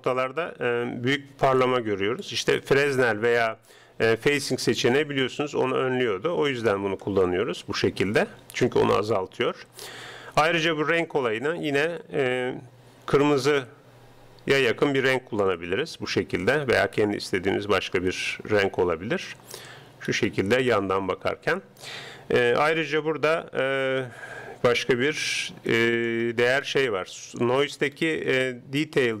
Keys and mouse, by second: 5.0-6.8 middle drag, 8.2-9.5 middle drag, 15.6-17.0 middle drag, 18.6-19.8 middle drag, 25.7-29.2 middle drag.